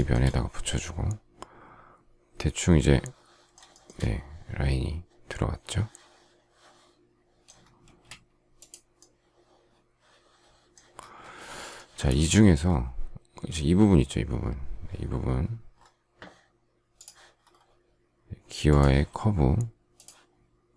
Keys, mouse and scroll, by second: 3.6 shift+middle click, 7.8 space.